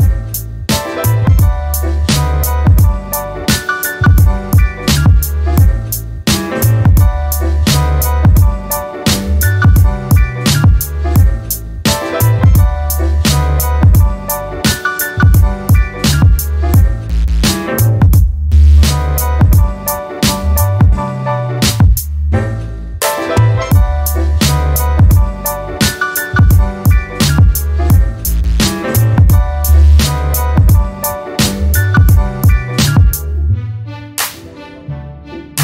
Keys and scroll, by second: 6.6 j, 12.0 0.